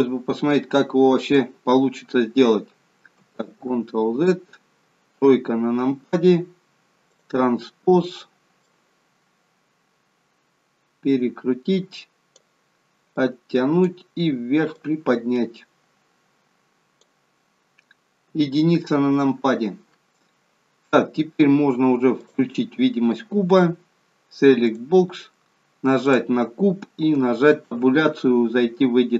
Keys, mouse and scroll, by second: 3.5 ctrl+z, 5.0 KP_3, 7.0 click, 8.7 click, 13.1 click, 14.7 click, 18.3 KP_1, 22.2 click, 24.6 click, 26.0 click, 27.6 Tab.